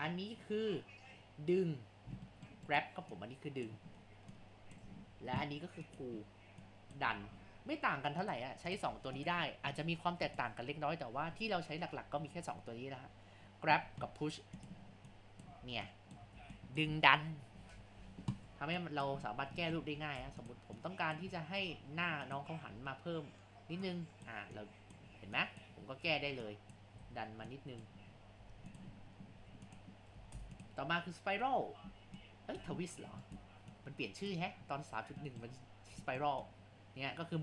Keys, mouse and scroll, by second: 2.3-2.7 shift+middle drag, 2.7-4.3 right drag, 4.3 click, 5.0 ctrl+z, 5.9-7.4 drag, 7.4 ctrl+z, 8.2-13.4 drag, 14.6-15.6 drag, 15.6 ctrl+z, 16.0 click, 16.4 ctrl+z, 16.6-18.0 drag, 18.0 ctrl+z, 18.9 click, 19.3-19.6 scroll up 3, 19.6 shift+middle click, 20.0 ctrl+z, 20.3 Tab, 20.8 click, 21.4 scroll down 2, 21.6 Tab, 22.8 a, 23.2 scroll down 2, 23.8-26.2 drag, 26.2 ctrl+z, 26.5-27.1 drag, 27.1 ctrl+z, 27.5-28.2 drag, 28.2 scroll up 3, 28.4 Tab, 29.4 Tab, 29.7 click, 30.2 ctrl+z, 30.4 Tab, 32.2 click, 33.0 scroll down 3, 33.3-35.2 right drag, 35.2-36.5 shift+middle drag, 36.5-37.4 drag.